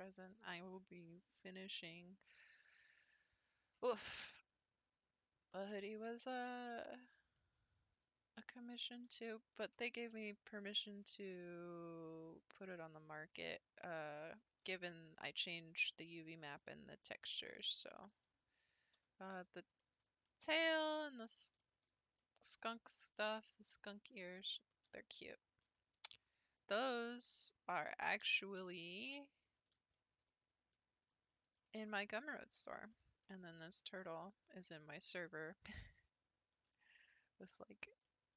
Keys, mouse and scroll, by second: 2.5-3.4 scroll down 1, 3.4-7.8 middle drag, 7.8 scroll up 1, 7.9 click, 9.1 h, 9.5 scroll down 1, 9.6-10.0 scroll up 1, 10.0-10.8 shift+middle drag, 10.8-11.3 scroll down 2, 11.3-11.9 shift+middle drag, 11.9-12.8 scroll down 4, 12.8 scroll up 3, 13.3-13.6 shift+middle drag, 13.6 scroll up 1, 13.8-14.6 middle drag, 14.6 scroll up 3, 14.8-18.1 shift+middle drag, 18.1 click, 19.0 h, 19.3 scroll down 2, 19.8-23.8 shift+middle drag, 23.8 click, 24.9 h, 25.3 click, 25.7 h, 26.3 middle click, 27.2 click, 28.2 h, 28.8-31.1 middle drag, 31.1-31.6 scroll down 3, 31.6-34.2 shift+middle drag, 34.2 click, 34.8-38.3 middle drag.